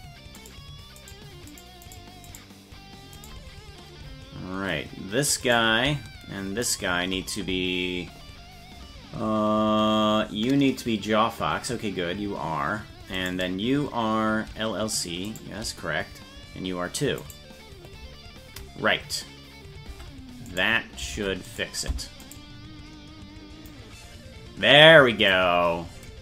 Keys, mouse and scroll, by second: 0.5 right click, 1.1 right click, 1.6 right click, 2.0 right click, 3.3 right click, 5.5 right click, 6.8 shift+right click, 13.3 right click, 15.4 shift+right click, 17.3 right click, 19.9 Tab, 20.6 right click, 21.2 ctrl+Tab, 21.5 right click, 22.4 right click, 23.8 click, 24.6 click, 25.7 scroll down 2.